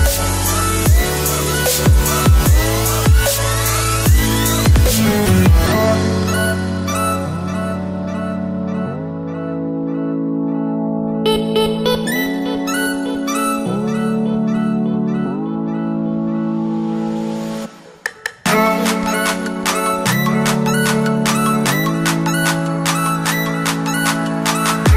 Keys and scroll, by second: 2.6 Return.